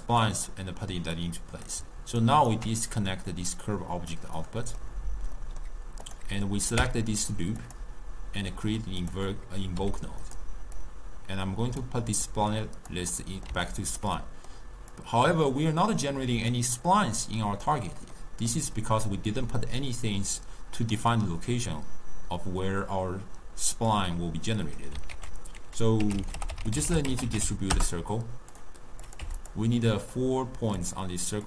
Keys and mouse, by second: 1.2 click, 2.3 ctrl+right click, 3.4-4.5 drag, 4.5-6.1 middle drag, 6.1 click, 6.9 w, 9.4 middle click, 9.9 g, 10.9-12.5 drag, 13.3-15.0 middle drag, 15.0-16.6 drag, 18.3-19.4 middle drag, 19.4 drag, 25.2 ctrl+a, 29.1 click, 30.3 drag.